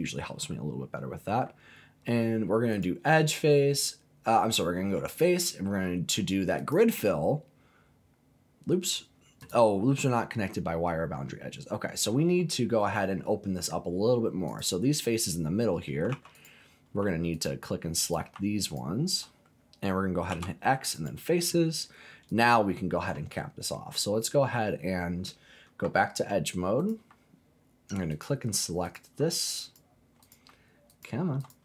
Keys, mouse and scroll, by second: 2.7-6.7 drag, 9.4 click, 9.9 middle click, 14.5 click, 16.1 3, 16.3 click, 17.3 alt+click, 18.0 click, 18.6 alt+click, 20.3 x, 22.3 click, 25.8 2, 26.8 click, 28.1 alt+click, 28.8 click, 29.6 alt+click, 30.2 click, 30.9 alt+click, 31.4 alt+click.